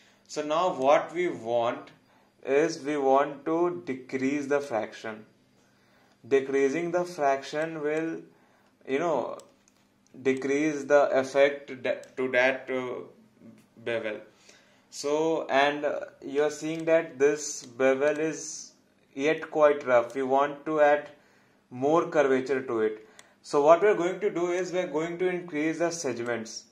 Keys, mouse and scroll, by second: 4.6 click, 7.9 click, 10.4 click, 16.8 click, 17.6 right click, 18.1 click, 23.2 click.